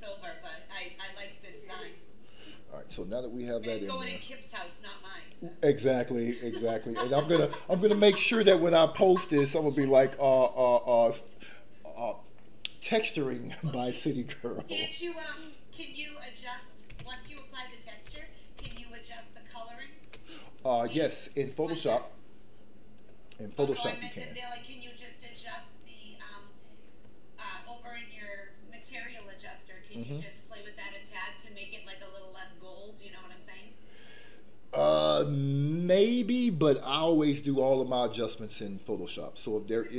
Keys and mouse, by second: 6.5 click, 15.0 click, 15.3-20.1 drag.